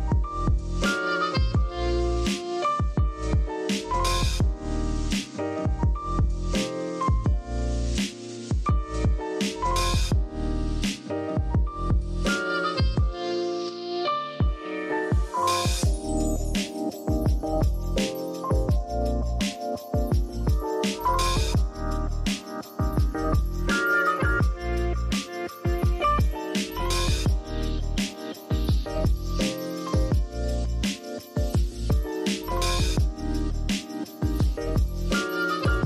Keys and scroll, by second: 1.8 v, 3.1 z, 3.4 v, 4.1 z, 12.8 super+', 15.9 super+z, 17.4-18.3 typing, 23.6 typing, 28.9-29.7 typing, 33.6-35.0 typing.